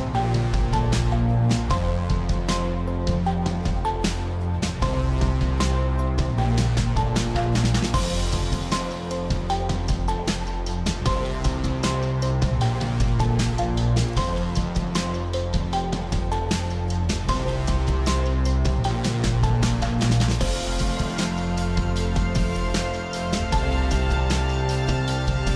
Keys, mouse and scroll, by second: 4.0 click, 5.3 click, 5.8 click, 6.4 ctrl+z, 6.9 click, 7.6 click, 8.2 click, 8.6 ctrl+z, 9.1 click, 9.9 click, 11.0 click, 13.0 click, 14.0 click, 14.8 click, 16.3 ctrl+t, 19.2 click, 23.8 click, 24.6 Return.